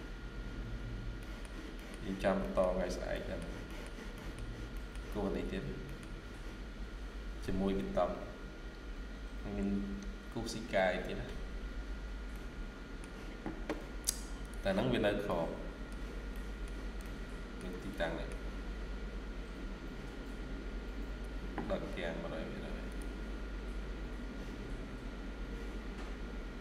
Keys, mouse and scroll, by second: 0.8 scroll down 1, 1.1 middle click, 1.8-2.3 scroll down 1, 2.3 middle click, 5.8 middle click, 11.7-12.3 scroll down 1, 12.3 middle click, 13.1-13.7 scroll down 1, 14.9 scroll down 1, 15.1 middle click, 16.5 scroll down 1, 16.9 shift+middle click, 17.8 middle click.